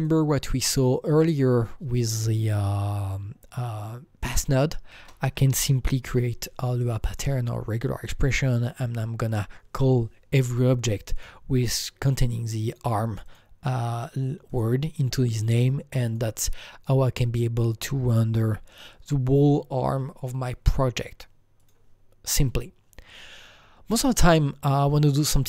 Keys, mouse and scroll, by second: 1.1-3.5 drag, 4.3 double click, 4.3-6.1 typing, 7.0 click, 11.1 click, 11.1 right click, 11.1 shift+a, 11.1 click, 12.2 click, 12.6 click, 13.2 click, 14.6 double click, 16.0 click, 21.6 click, 24.1 click, 25.0 click.